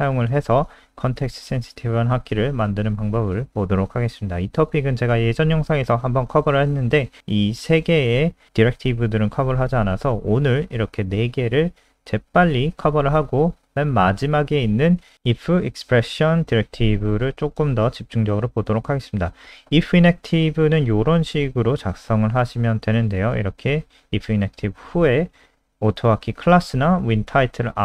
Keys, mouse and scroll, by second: 0.0 click, 17.1 ctrl+c, 17.2 click, 17.5 Return, 17.7 Return, 17.8 ctrl+v, 23.1 click.